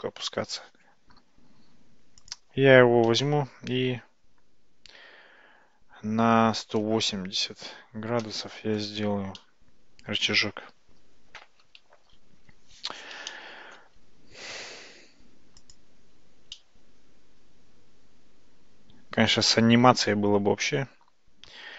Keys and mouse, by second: 2.3 click, 3.6 r, 9.5-11.7 middle drag, 13.3-13.8 shift+middle drag, 15.7 click, 16.6-21.7 middle drag.